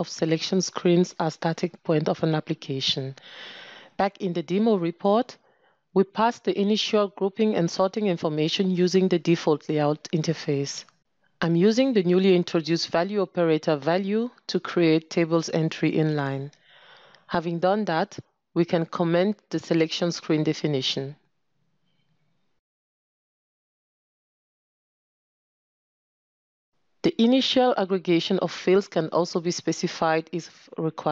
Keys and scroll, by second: 5.9 ctrl+space, 21.2 ctrl+<, 24.5 ctrl+<, 29.9 ctrl+space.